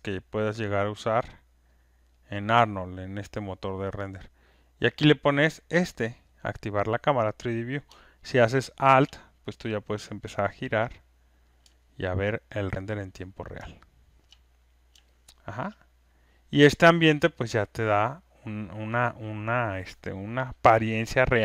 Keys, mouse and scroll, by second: 1.7 click, 4.5 click, 5.4 click, 9.0 alt+click, 9.1 alt+click, 10.8 alt+click, 12.2 click, 14.5 click, 15.7 click, 17.8 alt+click.